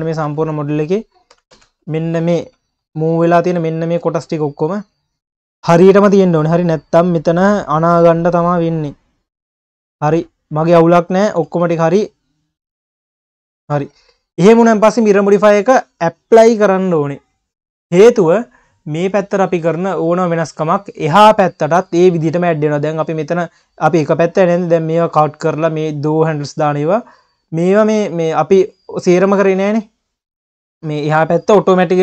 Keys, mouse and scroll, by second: 0.4 Tab, 1.3 1, 1.5 a, 2.0 q, 2.8-3.6 scroll down 2, 3.6 click, 4.2 scroll up 1, 4.4 q, 5.2-5.9 scroll up 1, 5.9 q, 11.5 scroll down 1, 11.8 q, 13.8 Tab, 18.7 click, 19.2 q, 20.6 q, 22.2 scroll up 2, 22.4 q, 23.6-24.3 scroll down 2, 24.3-25.8 scroll up 2, 24.4 q, 25.8-26.5 scroll up 3, 26.5 click, 27.3 click, 27.8 scroll down 1, 28.0 q, 29.0 q, 30.3-31.0 scroll down 2, 31.0-32.0 scroll down 1.